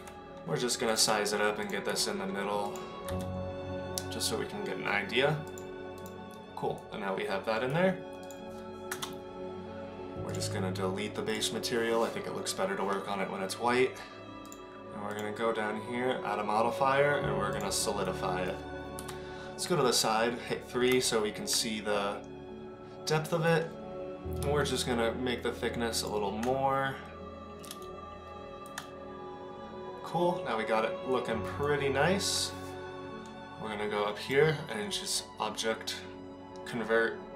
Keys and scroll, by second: 0.0 s, 1.0 g, 1.9 s, 3.2 g, 8.9 KP_0, 19.0 KP_3.